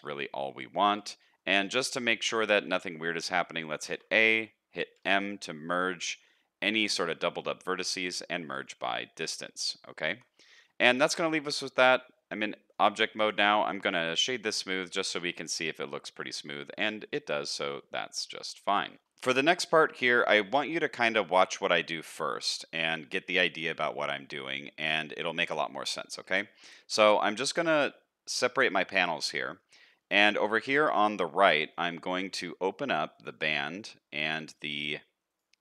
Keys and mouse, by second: 1.4 middle click, 2.2 middle click, 2.6 middle click, 3.8 a, 4.9 m, 9.2 middle click, 10.1 Tab, 10.3-10.9 middle drag, 12.5 shift+middle drag, 12.9 middle click, 14.2 middle drag, 14.6-18.9 middle drag, 19.0 shift+middle click, 19.6-22.5 middle drag, 22.8 shift+middle drag, 23.2 middle click, 23.8 shift+middle click, 24.3 middle click, 24.8 shift+middle click, 26.2 n, 31.3 shift+middle click, 31.7 middle click.